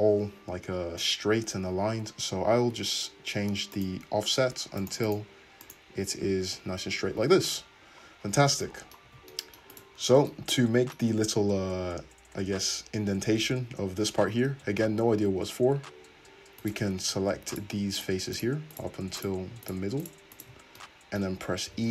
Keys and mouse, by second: 9.1 Tab, 14.6 `, 15.3 Tab, 16.6 middle click, 16.6 right click, 17.3 3, 17.5 middle click, 17.5 right click, 18.0 shift+middle click, 18.4 shift+click, 18.7 shift+middle click, 18.8 shift+click, 19.2 shift+middle click, 19.7 shift+click, 20.0 shift+middle click, 20.2 shift+click, 20.3 shift+middle click, 20.4-21.9 shift+drag, 21.7 e.